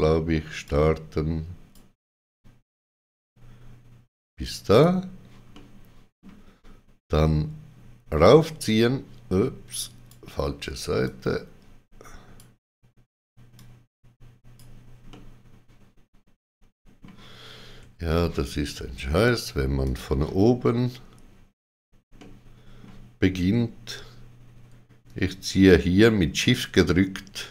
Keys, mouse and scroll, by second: 0.6 click, 4.6 click, 5.5 middle click, 8.2 click, 13.5 click, 15.4 middle click, 15.4 click, 19.2 click, 19.8 click, 22.1 middle click.